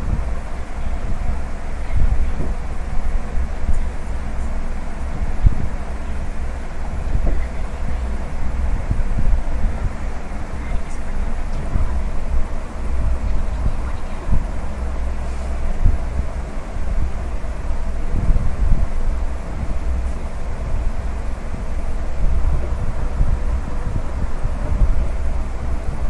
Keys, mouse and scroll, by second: 0.1 scroll up 1, 2.4 click, 3.5 click, 6.6 middle click, 8.5 click, 11.1 middle click, 12.5 middle click, 13.1-14.5 scroll down 2, 14.5 middle click, 15.5 s, 17.8 click, 18.7 s, 22.3-22.8 scroll down 1, 22.8 middle click, 23.7 scroll down 1, 24.1 middle click, 25.3 shift+middle click.